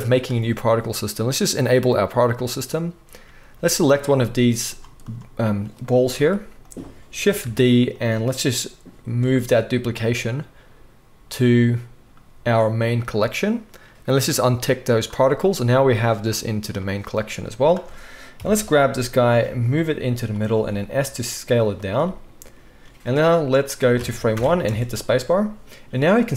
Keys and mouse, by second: 1.4-1.8 drag, 1.8-6.7 right drag, 2.1 click, 2.1 middle click, 3.8 click, 3.8 middle click, 4.6 click, 4.6 middle click, 5.0-5.8 drag, 5.0-5.8 middle drag, 6.1 g, 6.7-12.5 middle drag, 7.4 shift+d, 9.1 m, 14.9 click, 15.0 middle click, 15.9-17.4 drag, 17.4-20.2 middle drag, 18.3 KP_1, 19.3 g, 20.6-22.2 middle drag, 20.6 s, 24.3 shift+Left, 24.6 space.